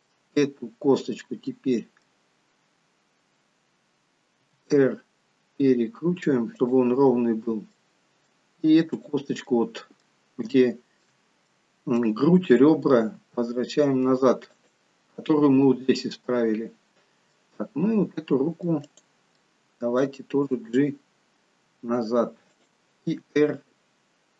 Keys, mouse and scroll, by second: 0.6-1.1 scroll down 1, 1.5 middle click, 1.5 scroll down 1, 4.5 r, 7.1 scroll up 1, 7.8 middle click, 9.1 click, 9.6 middle click, 10.6 shift+middle click, 11.5 middle click, 13.4 r, 15.1-15.8 scroll down 2, 16.4-16.9 scroll up 3, 17.3 middle click, 17.3 scroll up 1, 19.0 click, 19.6 middle click, 20.7 g, 23.4 r.